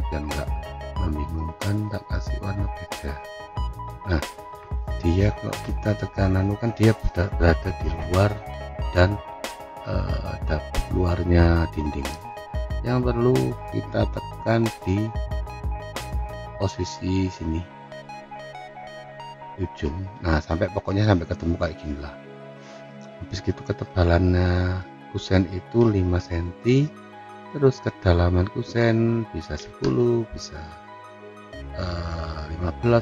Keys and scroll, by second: 5.8 F4, 25.8 5, 26.6 Return, 29.1-30.0 typing, 30.8 Return.